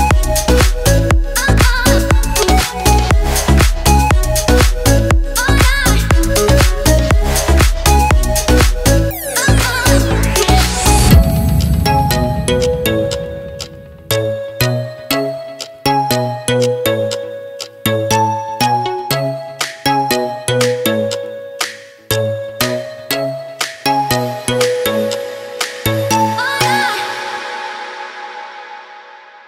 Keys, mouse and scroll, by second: 0.1 shift+middle click, 0.4 middle click, 1.1 click, 2.7-3.0 scroll down 3, 3.0 shift+middle click, 3.4 a, 3.6 shift+middle click, 4.3 r, 9.3 middle click, 9.9 middle click, 10.5 shift+middle click, 10.9 scroll up 2, 11.2 shift+middle click, 12.2 s, 14.2 middle click, 15.8 click, 16.2 shift+middle click, 16.5 Tab, 17.3 middle click, 20.4 shift+middle click, 21.3 middle click, 24.4-25.0 scroll up 2, 24.8 middle click, 25.9 click, 26.5 g, 27.3 shift+middle click, 27.8 g, 28.3 shift+middle click.